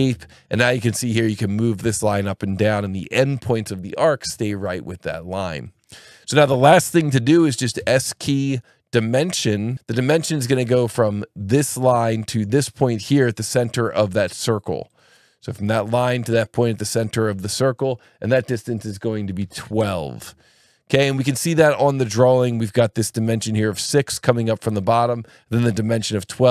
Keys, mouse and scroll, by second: 0.5 click, 7.8 s, 9.6 click, 10.7 click, 14.9 click, 17.6 click, 19.4 KP_1, 19.6 KP_2, 19.7 KP_Enter, 21.0 Escape, 21.4 click, 23.3 click, 24.7 click.